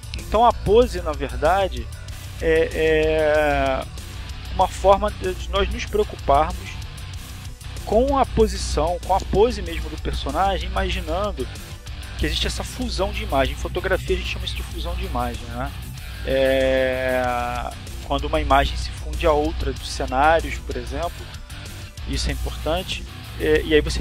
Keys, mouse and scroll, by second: 3.2 click, 20.8 click.